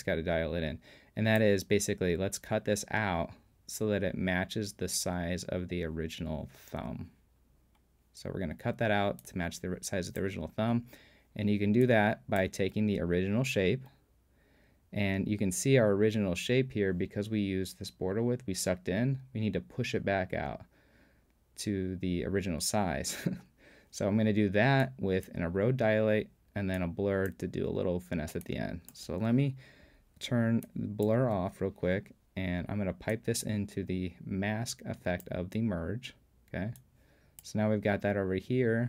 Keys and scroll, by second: 31.3 super+p.